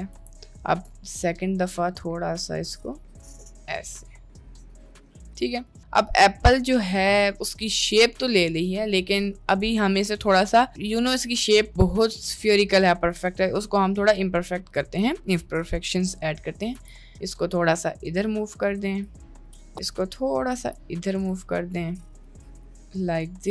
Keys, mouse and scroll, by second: 5.0 Tab, 5.2 middle click, 6.4 middle click, 6.8-7.7 middle drag, 8.1 Tab, 8.4 middle click, 9.5 click, 10.4 middle click, 11.0 middle click, 11.9 click, 12.3 Tab, 13.2 Tab, 14.3 middle click, 15.0 click, 16.0 middle click, 16.8 g, 19.6 click, 19.8 middle click, 20.6 g, 22.6 g.